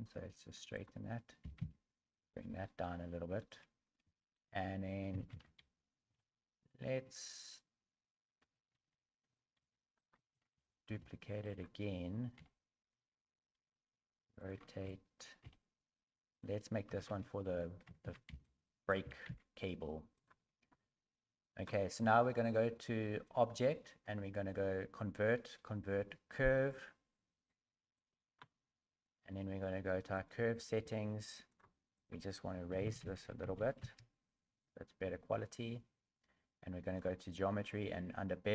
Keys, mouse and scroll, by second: 0.7 right click, 0.7 s, 1.4 g, 2.6 shift+middle click, 3.5 shift+scroll up 1, 3.8 scroll down 3, 4.1 shift+scroll up 1, 4.1 shift+middle click, 5.1 a, 5.3 a, 6.2 Tab, 7.4 Tab, 7.4 right click, 7.4 a, 8.4 Tab, 8.7-10.3 typing, 31.5 click, 31.9 click.